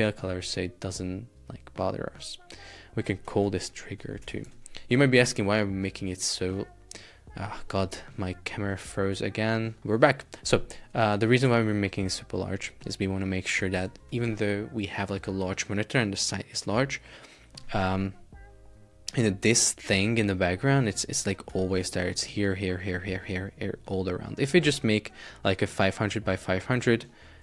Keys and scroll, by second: 3.3 shift+t, 4.3 Return, 4.5 super+Tab, 21.7 shift+super+4, 22.2 space.